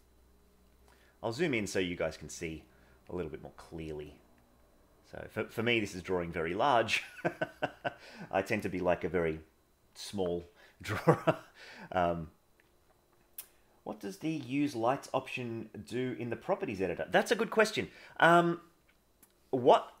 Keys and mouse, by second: 0.8 middle click, 3.1 click, 4.1 click, 4.8 click, 5.9 click, 6.6 click, 7.4 click, 7.8 click, 12.1 click, 18.3-19.6 middle drag.